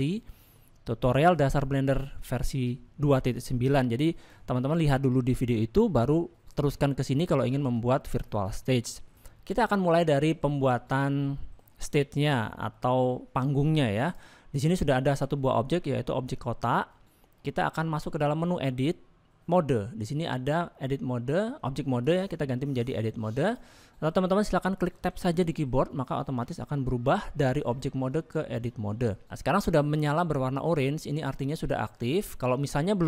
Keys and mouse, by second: 0.0 middle click, 3.9 middle click, 8.0 shift+middle click, 8.8 middle click, 11.4 middle click, 12.7-13.0 middle drag, 14.1 click, 16.3 middle click, 22.0-23.6 drag, 29.0 middle click.